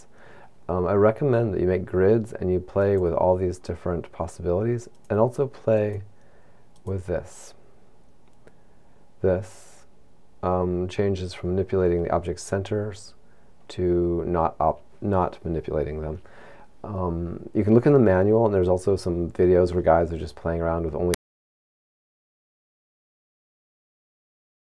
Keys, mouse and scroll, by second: 2.8 click, 5.0 click, 5.8 click, 6.7 click.